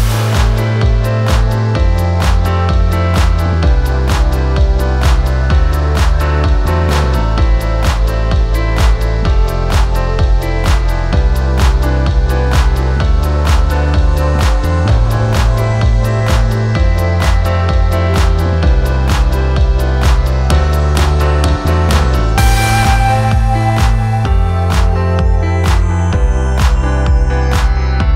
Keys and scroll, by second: 4.2 F1, 4.6 F2, 6.7 shift+m, 6.8 shift+o, 7.0 shift+t, 7.1 shift+h, 7.1 Return, 8.4 p, 9.1 4, 20.5 F9, 27.2 p.